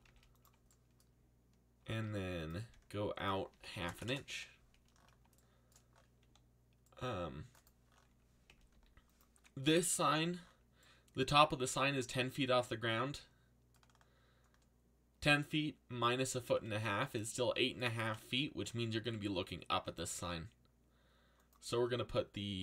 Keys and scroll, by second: 0.0-4.4 typing, 6.2 c, 8.7 x, 9.6 z, 19.0 a.